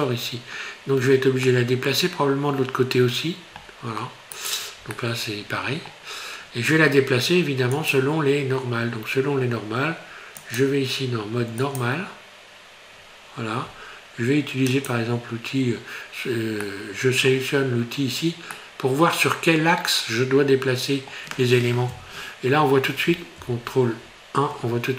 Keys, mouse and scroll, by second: 1.0 scroll down 3, 1.5 middle click, 4.4 shift+right click, 4.9 middle click, 7.7 click, 14.7 click, 16.7 middle click, 18.5 middle click, 19.7 middle click, 20.6 middle click, 20.8 middle click, 21.9 KP_1, 23.4 ctrl+KP_1.